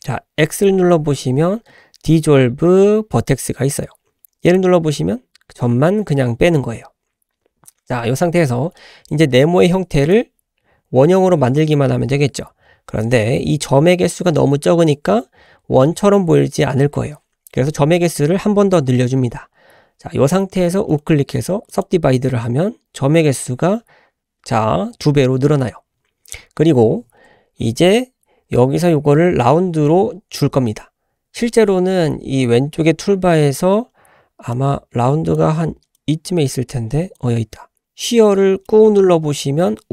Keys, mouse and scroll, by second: 9.1-10.1 drag, 20.9 right click, 34.5-37.8 drag, 38.7-39.9 drag.